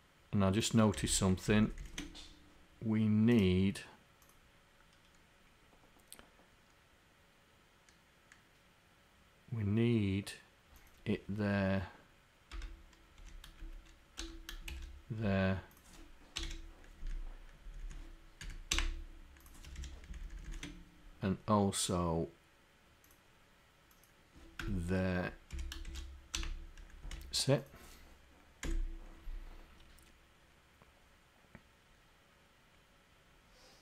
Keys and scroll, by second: 13.6 Up, 14.6 Up.